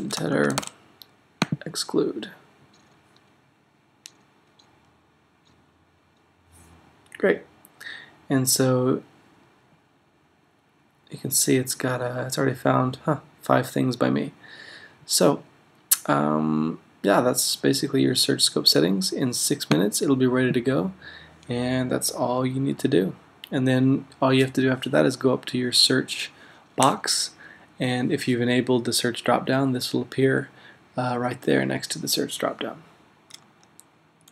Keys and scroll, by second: 0.0-1.1 typing.